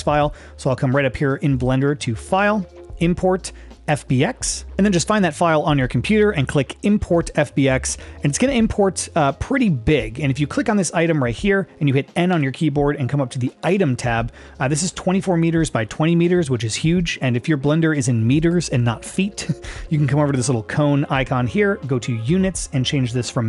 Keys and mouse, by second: 1.7-4.7 drag, 10.0-10.3 middle drag, 10.7 click, 12.3 n, 13.6 click, 22.3 click.